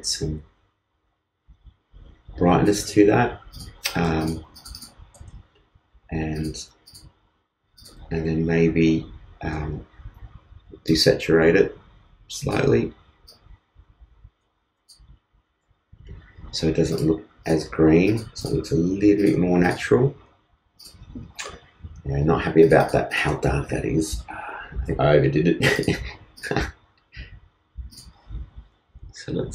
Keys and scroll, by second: 8.8 super+u, 15.2 super+z.